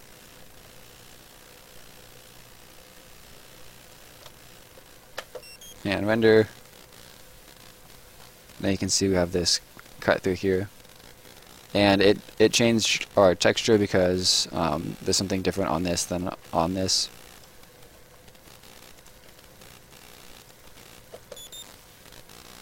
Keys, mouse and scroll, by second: 0.6 shift+click, 2.3 ctrl+shift+click, 4.2 shift+click, 4.6 Escape, 5.1 space, 6.1 right click, 7.8-8.3 scroll up 1, 8.3 right click, 9.8-10.7 scroll down 1, 10.7 right click, 13.9 click, 18.4 3, 18.9 click, 19.9 click, 20.4 click, 20.6-21.1 typing, 22.0 right click.